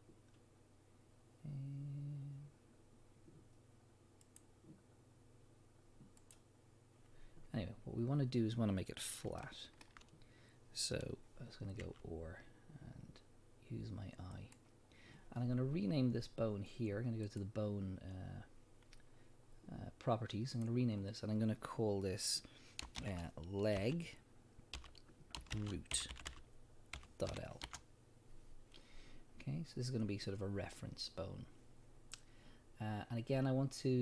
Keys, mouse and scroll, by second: 4.2 click, 6.2 click, 8.0 scroll up 1, 9.4-14.5 shift+middle drag, 10.0-10.7 scroll up 1, 11.8 r, 14.5 click, 17.2 click, 20.5-34.0 drag, 26.3 o, 27.7 Return.